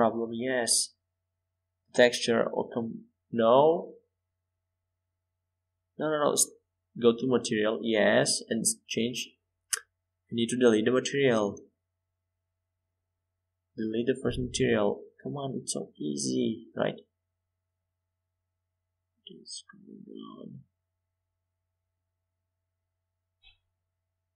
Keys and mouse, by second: 0.2 middle click, 0.6 middle click, 5.7-8.8 drag, 9.4-12.3 drag, 14.3-16.0 drag, 17.1-18.3 middle drag, 21.0 shift+a.